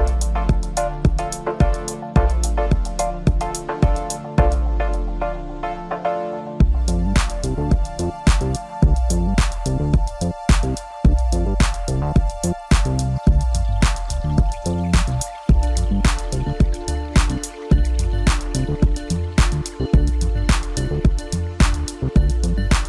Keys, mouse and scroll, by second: 0.4-1.0 drag, 1.6-2.3 drag, 2.9 click, 6.4 g, 10.8 Tab, 11.9 click, 13.6 click, 14.4-15.8 drag, 16.5-17.5 scroll down 1, 17.5-20.6 middle drag, 21.6 KP_0.